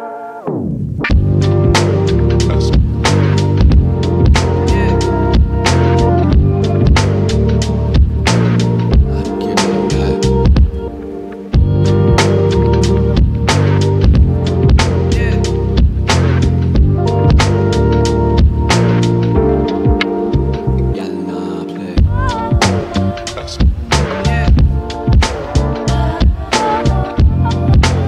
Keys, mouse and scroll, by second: 1.1 click, 5.1 scroll up 1, 14.2-14.8 scroll up 1, 15.1 click, 18.8 click, 18.9-19.3 scroll up 1, 21.4-25.0 drag.